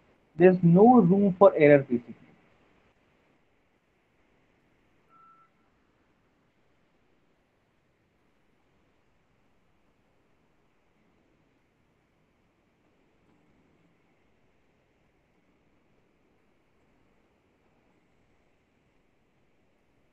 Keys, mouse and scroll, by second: 2.5 click, 4.6 click, 6.6 click, 9.3 alt+middle click, 10.5 click, 11.0 click, 12.6 click, 13.3 f, 14.2 middle click, 14.4 middle click, 14.6 middle click, 14.8 middle click, 17.7 click, 18.7 middle click, 18.9 middle click.